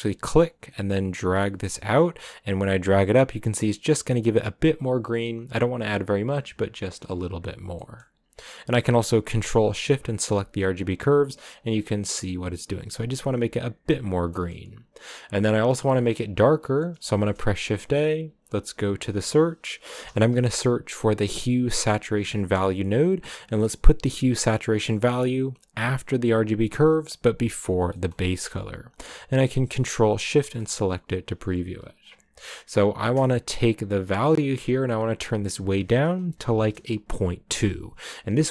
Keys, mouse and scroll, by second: 2.1-6.7 drag, 7.9-9.8 middle drag, 9.8 ctrl+shift+click, 11.4-14.6 drag, 14.6-21.6 middle drag, 30.0 ctrl+shift+click, 30.7-31.9 scroll up 1, 31.9-37.4 scroll up 1, 37.4-38.5 drag.